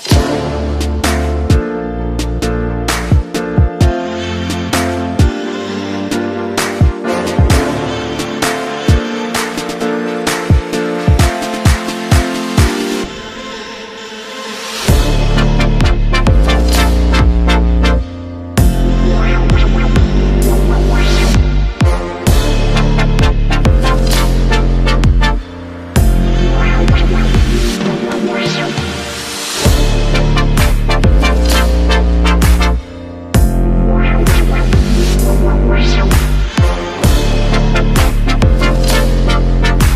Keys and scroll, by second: 18.0 ctrl+=, 23.8 ctrl+-, 25.5 ctrl+0, 36.4 ctrl+=, 37.8 ctrl+[.